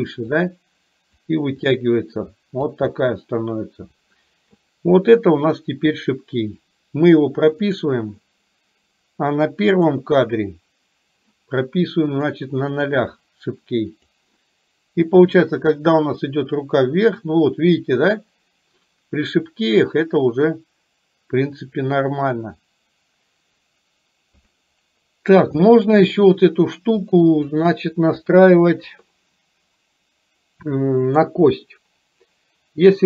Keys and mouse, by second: 0.5 click, 1.7-2.8 drag, 7.7 click, 9.8 click, 12.3 click, 15.3-24.6 drag, 25.7 shift+middle click, 27.2-27.8 drag, 31.2 click.